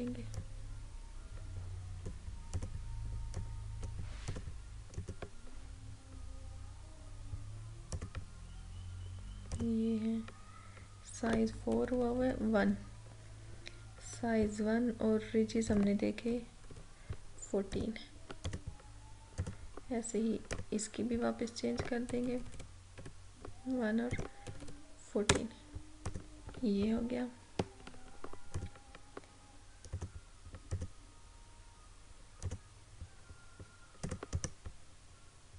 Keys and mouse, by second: 8.0 click, 11.8 Down, 15.8 click, 16.2 Down, 17.8 click, 22.1 Down, 24.2 click, 24.2 typing, 24.5 Down, 25.4 Return, 26.1 click, 28.5 click, 34.3 right click.